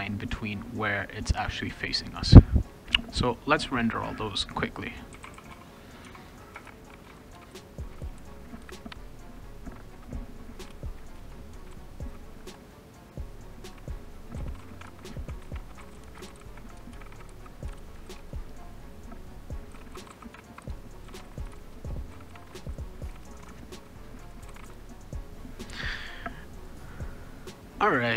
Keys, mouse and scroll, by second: 4.9-12.9 typing, 6.0 Tab, 10.0 Return, 11.5 click, 11.6 click, 12.3 click, 13.7 Return, 14.1-18.3 typing, 14.2 click, 18.8 click, 19.6-25.1 typing, 25.1 click.